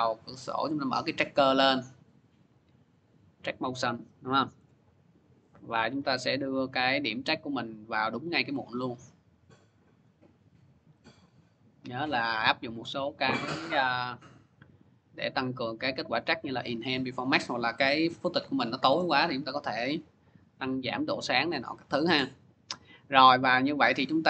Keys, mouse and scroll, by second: 0.4 click, 2.9 click, 4.4-5.2 scroll, 7.3 click, 9.8 click, 11.1 click, 12.6 click, 12.6 scroll, 14.2 click, 17.1 click, 18.8 click, 20.9 click.